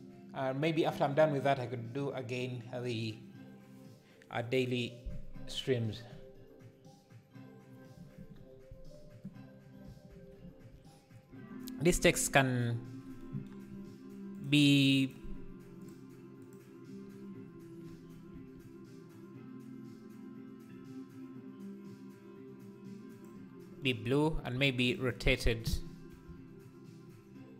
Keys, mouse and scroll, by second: 18.3 s, 24.9 shift+right click, 25.4 scroll down 1.